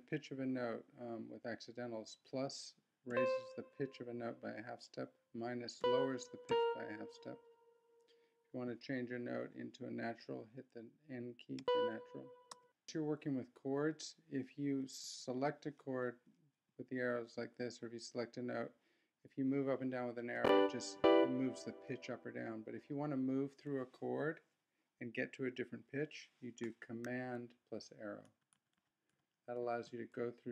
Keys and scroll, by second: 12.8 shift+super+p, 15.0 Left, 16.7 Right, 20.4 Down, 21.0 Up, 28.2 super+Up, 29.6 super+Down.